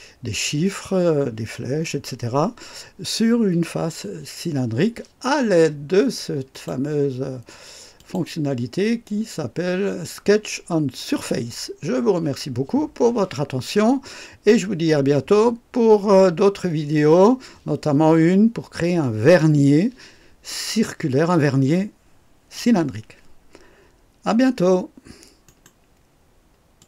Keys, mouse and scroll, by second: 6.5 click, 8.0 click, 25.5 right click, 26.8 click.